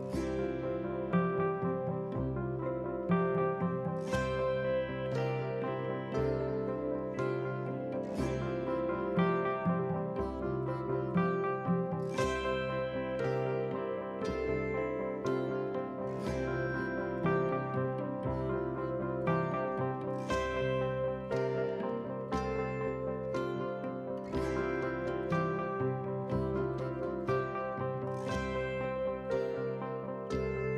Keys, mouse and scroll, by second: 3.8 ctrl+t, 4.7 click, 9.6-18.4 drag, 20.2 right click, 24.6 click, 26.2 ctrl+t, 27.1 alt+scroll down 1, 27.4-30.7 drag.